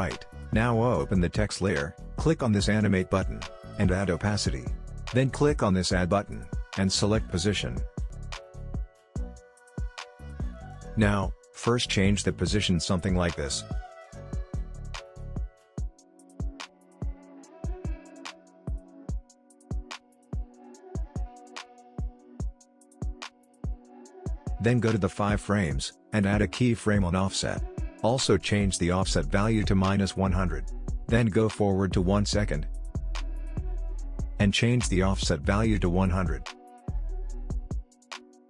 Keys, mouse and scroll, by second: 4.4 click, 6.3 click, 10.2 click, 11.2 ctrl+z, 11.6-19.2 drag, 20.7 alt+scroll up 1, 22.1-31.6 drag, 31.6-38.4 drag.